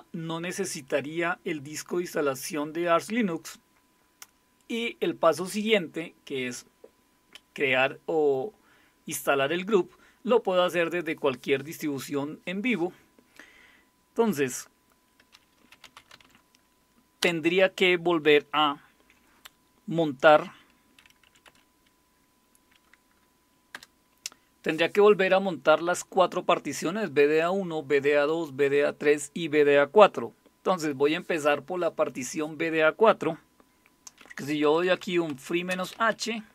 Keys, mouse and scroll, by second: 15.5-16.7 typing, 17.2 Return, 21.2 Up, 21.4 Up, 23.7 Return, 34.4-36.5 typing.